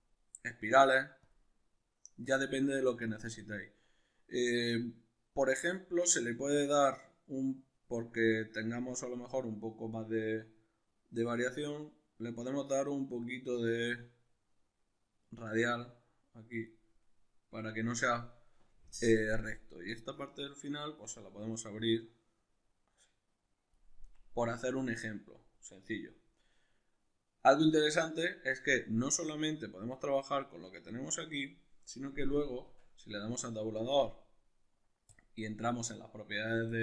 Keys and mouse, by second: 29.3-36.8 middle drag, 32.7 Tab.